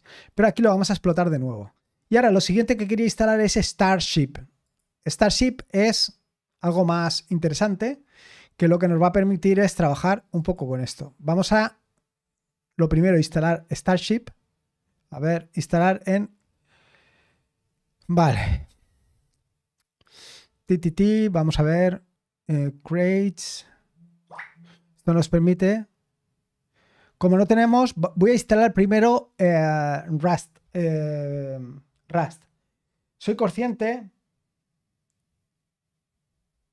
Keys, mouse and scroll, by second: 1.1 click, 3.1 click, 4.6 click, 4.9 click, 6.9-8.4 scroll down 2, 9.3 scroll down 1, 10.3 click, 12.3-13.2 scroll up 2, 15.7 click, 16.5-16.8 scroll down 1, 17.4 scroll down 1, 18.5-19.0 scroll down 2.